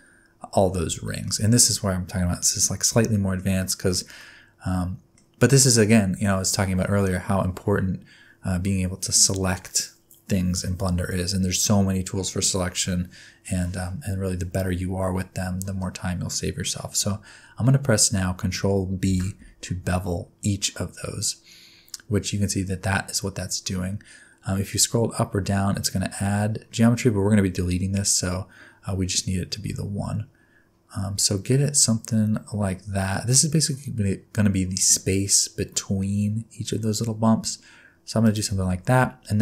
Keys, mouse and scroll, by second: 1.1 shift+middle click, 3.1 shift+middle click, 3.6 shift+middle click, 4.2 middle click, 15.8 middle click, 19.0 ctrl+b.